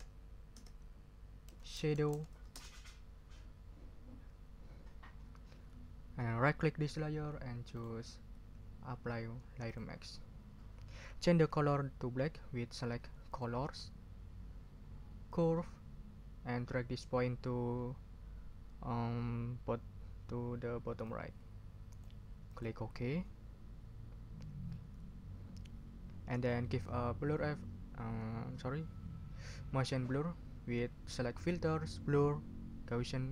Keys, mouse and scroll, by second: 0.0-2.6 typing, 7.7 click, 9.6 click, 13.3 click, 15.3 click, 21.0-22.2 drag, 22.5 click, 31.3 click.